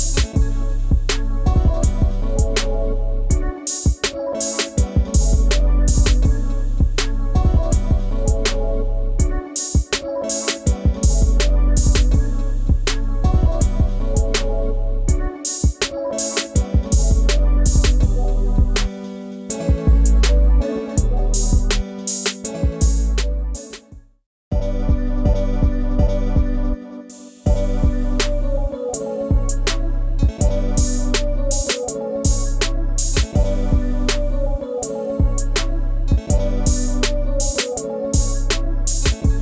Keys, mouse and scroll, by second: 2.1-2.5 scroll down 1, 2.5 ctrl+space, 2.6 ctrl+click, 2.9 ctrl+space, 3.1 ctrl+scroll up 1, 7.2 scroll down 1, 7.5 scroll up 1, 10.2 scroll down 1, 10.4-10.8 scroll up 1, 11.3 scroll down 1, 11.6 ctrl+space, 11.7 ctrl+click, 12.0 ctrl+space, 12.9 ctrl+scroll up 1, 38.0 double click.